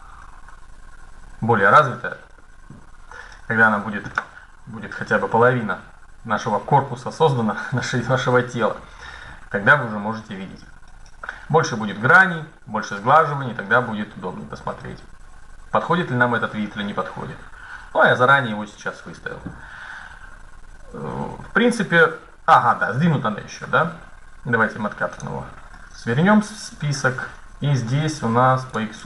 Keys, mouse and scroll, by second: 22.1-23.1 middle drag, 23.1-23.8 scroll up 1, 24.9-26.7 drag, 28.4-29.0 drag.